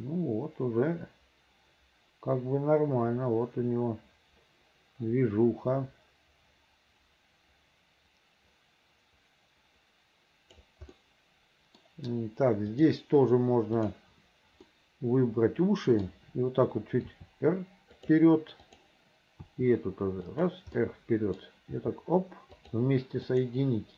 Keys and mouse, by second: 11.0 middle click, 12.8 click, 13.9 click, 14.8-16.1 middle drag, 17.1 r, 18.8 click, 19.5 r, 21.0 middle click, 21.8 r, 23.3 click.